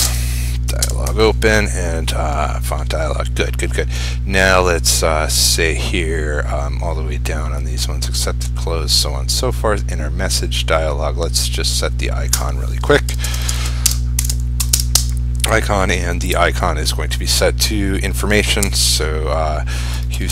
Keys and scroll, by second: 0.1 ctrl+space.